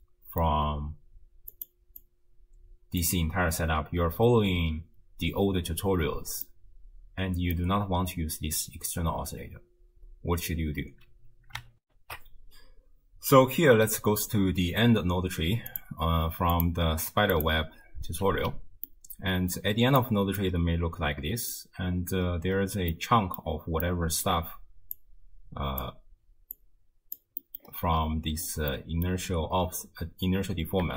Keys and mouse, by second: 1.6 click, 2.0-3.0 drag, 6.5-7.6 middle drag, 11.9 ctrl+alt+shift+q, 15.7 click, 16.6 click, 17.4 click, 18.9 ctrl+click, 19.0-20.0 ctrl+middle drag, 20.4-21.6 middle drag, 23.0 middle click, 23.9 middle click, 25.0 click, 26.6 click, 26.8-27.2 drag, 27.5 middle click, 28.7 middle click, 30.8 g.